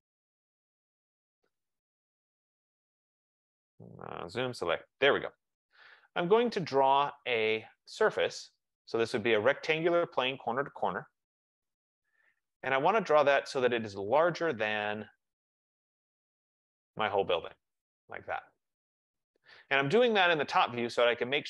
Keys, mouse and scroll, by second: 2.1-2.6 scroll, 3.4 click, 4.0-5.2 typing, 5.9 click, 7.7 click, 8.7 click, 11.7 click, 14.5 click, 17.3 click.